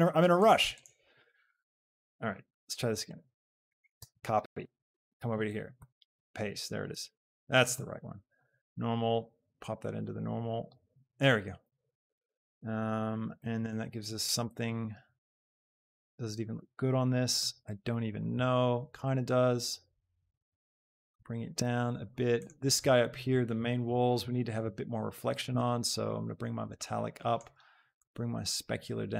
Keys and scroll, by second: 4.1 ctrl+c, 7.1 g.